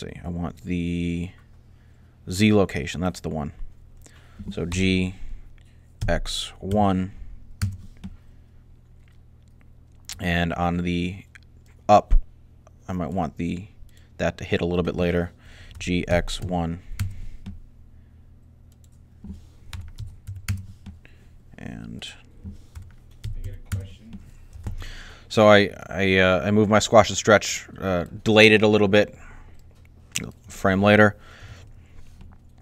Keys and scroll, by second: 4.6 g, 5.6-6.4 typing, 15.6-16.2 typing, 19.6 typing, 22.6-23.8 typing, 31.3 alt+a.